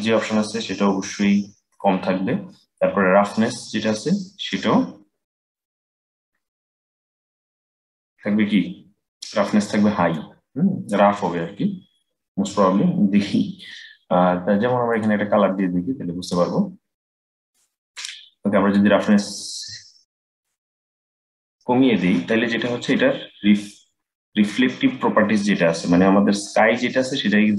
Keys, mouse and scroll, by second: 3.3-6.3 drag, 11.2-11.7 scroll up 4, 11.7-12.9 scroll down 6, 12.9-14.6 middle drag, 14.6 click, 18.4-21.5 drag, 22.4-23.2 scroll up 3, 23.2-24.4 scroll up 4, 24.4-25.3 scroll down 2, 25.3-26.8 scroll down 3, 26.8-27.5 scroll up 3.